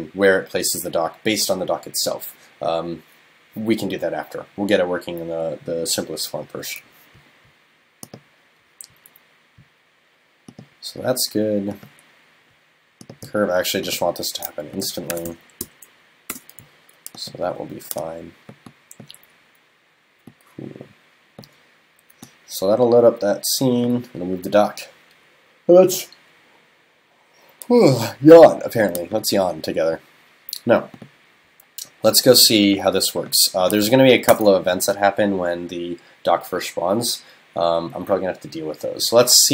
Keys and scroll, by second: 34.3 super+BackSpace.